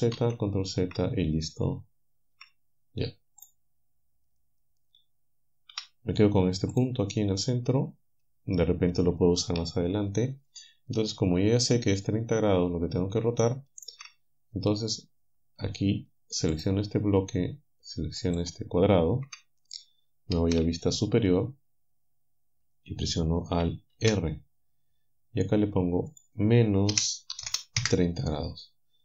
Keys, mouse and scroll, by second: 0.2 ctrl+z, 2.4 a, 5.7 g, 6.8 click, 13.4 shift+right click, 16.6 alt+shift+right click, 18.2 alt+shift+right click, 20.4 KP_7, 24.0 alt+r, 26.1 click, 26.9 -, 27.4 0, 27.8 Return.